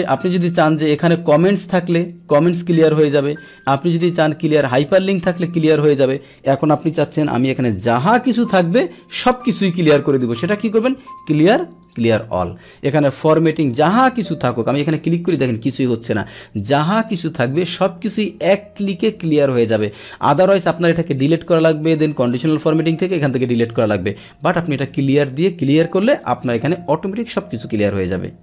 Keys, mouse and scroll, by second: 0.0 click, 2.3 click, 3.3 click, 5.2 click, 10.9 click, 11.8 click, 14.1 click, 14.8 click, 15.7 click, 16.2 Delete, 20.4 click, 22.2 click, 23.8 click.